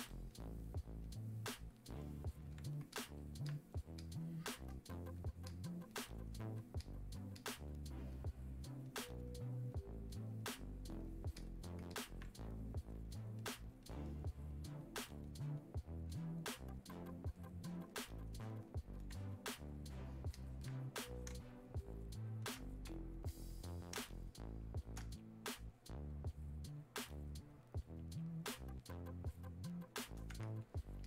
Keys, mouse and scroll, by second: 21.3 space, 21.8 click, 22.1 space, 23.3 click, 24.0 space, 24.4 click, 24.5 space, 25.3-31.0 drag.